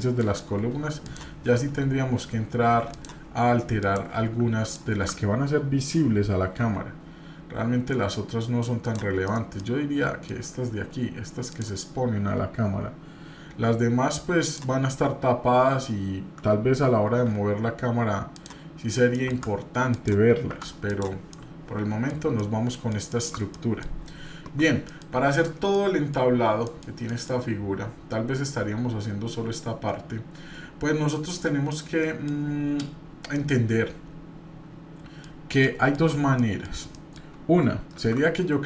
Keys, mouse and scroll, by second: 0.2 s, 2.9 click, 3.8 click, 4.6 alt+click, 6.6 s, 9.3 middle click, 9.3 scroll down 1, 9.6 middle click, 11.5 click, 14.5 alt+click, 18.8 scroll down 2, 19.1 middle click, 19.9 click, 20.5 Tab, 20.8 click, 21.3-22.1 middle drag, 22.2 scroll down 1, 22.4-22.9 middle drag, 23.5 middle click, 24.8 middle click, 25.7 middle click, 26.3-26.6 scroll up 1, 26.6 middle click, 27.1 middle click, 27.4-27.9 scroll down 2, 31.7 middle click, 33.3-35.2 middle drag, 35.6 middle click, 36.4 shift+middle click, 36.9 middle click, 38.0 shift+a.